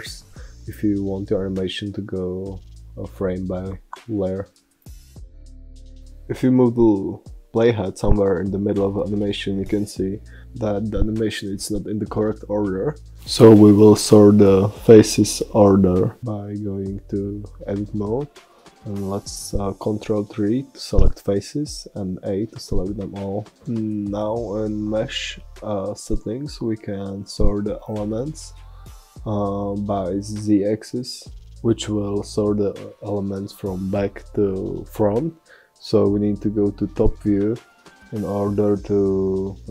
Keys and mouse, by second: 3.2 click, 3.4 click, 3.7 click, 4.0-6.5 drag, 14.5 Tab, 16.9 a, 22.0 middle click, 22.4 middle click, 23.2-25.2 middle drag, 24.3 a, 25.4-27.2 middle drag, 29.3-31.3 middle drag, 36.3-38.1 middle drag.